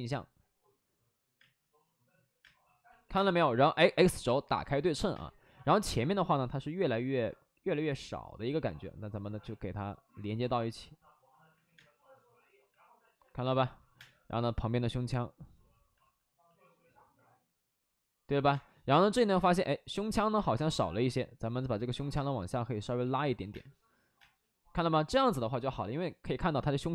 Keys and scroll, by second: 1.3 space, 2.3 space, 2.8 x, 3.1 space, 5.1 space, 5.8 2, 8.2 2, 8.7 2, 11.7 space, 13.1 alt+s, 13.4 space, 13.7 3, 13.9 space, 15.9 alt+s, 18.2 alt+s, 18.5 space, 18.9 space, 20.3 ctrl+z, 20.4 space, 21.9 alt+s, 22.1 space, 23.4 space, 24.1 space.